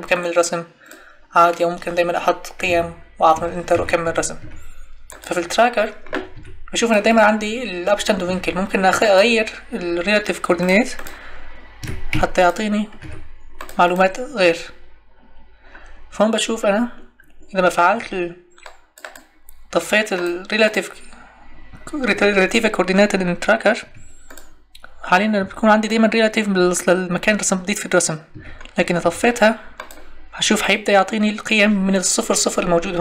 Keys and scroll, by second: 2.7 Tab, 6.3 Escape, 8.2 Escape, 11.8 Escape, 17.9 Escape, 23.8 Escape, 25.4 Escape, 28.3 Escape.